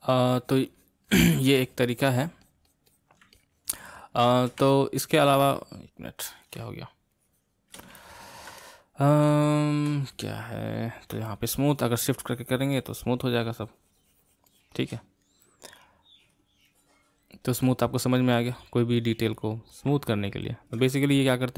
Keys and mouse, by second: 0.4-3.3 drag, 3.3-6.2 middle drag, 6.2 click, 7.1-11.3 shift+middle drag, 11.3-14.4 shift+drag, 14.5-17.5 shift+drag, 17.6-20.1 drag, 20.1-21.5 shift+middle drag.